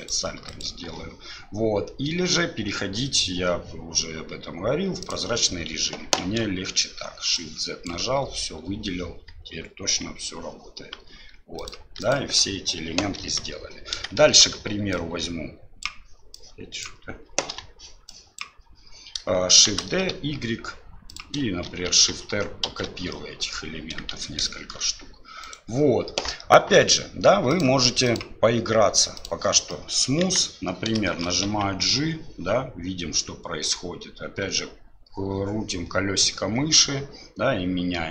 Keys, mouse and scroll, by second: 0.0 alt+click, 0.5 alt+click, 5.1 click, 6.2 shift+z, 7.5 click, 11.6 alt+click, 12.0 alt+click, 13.2 KP_7, 14.1 middle click, 14.9 click, 16.4 click, 17.5 Delete, 18.1 click, 19.7 shift+d, 21.7 shift+r, 21.9 shift+r, 22.2 shift+r, 22.7 shift+r, 23.2 middle click, 24.1 shift+z, 24.5 shift+middle click, 25.5 right click, 27.5 click, 28.1 click, 29.7 middle click, 30.2 KP_1, 31.0 shift+middle click, 31.4 g.